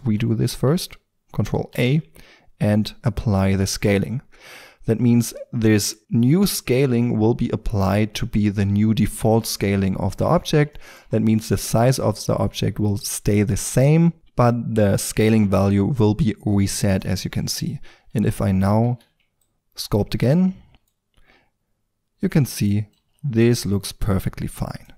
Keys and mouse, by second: 0.1 ctrl+z, 1.7 ctrl+a, 11.0-16.1 drag, 17.6 Tab, 18.9 ctrl+d, 18.9-20.7 drag, 20.7 x, 20.7 c, 20.9-21.2 drag, 21.5-22.9 drag, 22.9 shift+f, 23.9 drag.